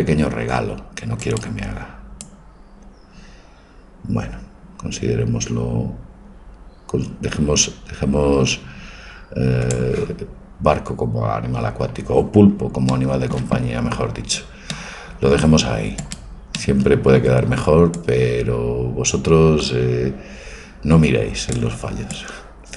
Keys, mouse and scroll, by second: 1.2-3.2 right drag, 2.3-4.4 drag, 15.1 middle click, 15.5-18.1 middle drag, 18.1-20.0 drag, 22.3-22.7 drag.